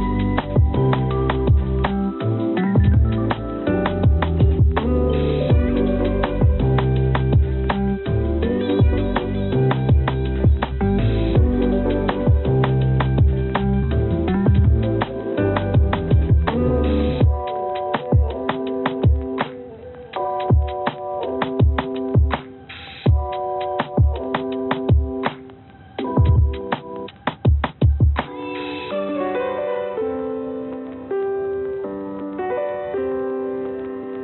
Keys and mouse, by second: 0.4 click, 1.2 shift+d, 5.5-9.1 drag, 9.1-14.1 drag, 14.6-17.3 drag, 17.9 click, 18.1-19.1 drag, 19.7 click, 20.9 click, 23.5-25.0 drag, 25.5 g, 33.6 click.